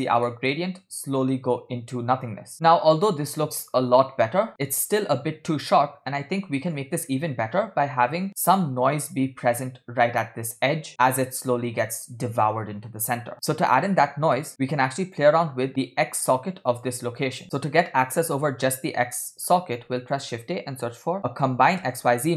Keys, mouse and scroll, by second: 0.3 middle click, 0.6 space, 2.5 scroll down 1, 7.9 space, 13.3 middle click, 13.3 scroll down 2, 14.5 click, 14.5 middle click, 15.5 scroll up 4, 16.9 click, 19.2 middle click, 19.8 shift+a.